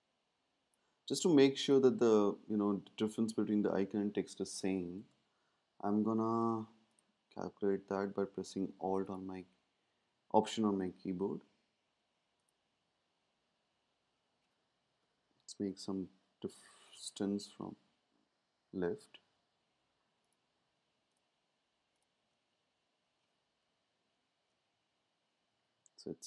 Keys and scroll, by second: 5.3 Left, 15.0 shift+Left, 17.5 Left, 24.0 shift+Left.